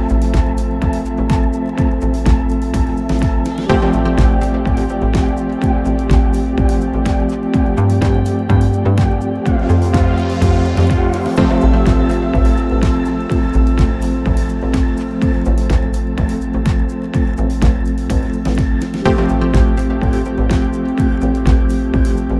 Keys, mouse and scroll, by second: 3.2-4.6 scroll up 4, 4.6-7.5 drag, 9.1 KP_1, 10.9 click, 13.5 ctrl+right click, 15.4 ctrl+click, 17.6 ctrl+click, 18.6 ctrl+right click, 21.1 shift+click, 21.8 click.